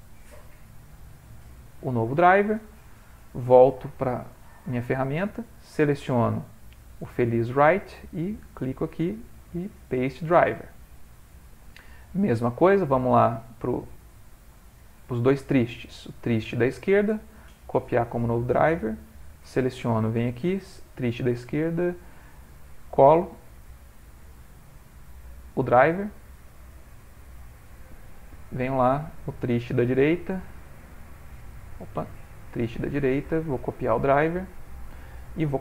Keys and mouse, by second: 3.6 click, 6.5 middle click, 6.8 middle click, 6.9 middle click, 7.5 click, 8.5 right click, 13.6 click, 16.1 right click, 18.9 click, 20.9 click, 21.8 right click, 27.4 click, 28.5 click, 31.3 right click, 32.0 Escape, 32.6 right click.